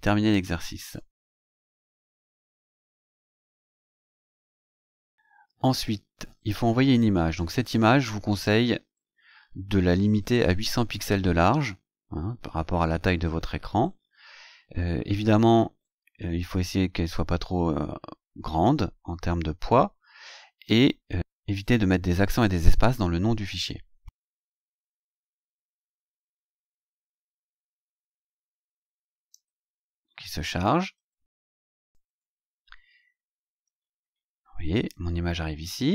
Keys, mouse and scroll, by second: 1.0 ctrl+c, 2.0 click, 3.7 ctrl+shift+v, 4.7-5.0 scroll down 2, 5.4 scroll down 2, 6.4 scroll down 2, 25.1 Tab, 27.3-29.5 drag, 31.8 click, 33.3-33.7 scroll down 2, 34.1 scroll down 2, 35.1-35.4 scroll down 2, 35.6-35.9 scroll down 4.